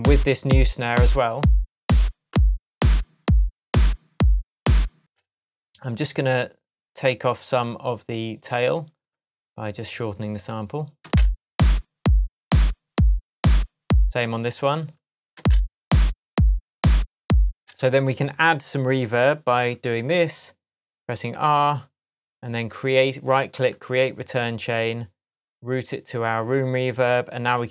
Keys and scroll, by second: 4.9 space, 11.0 space, 14.2 space, 15.3 space, 17.4 space.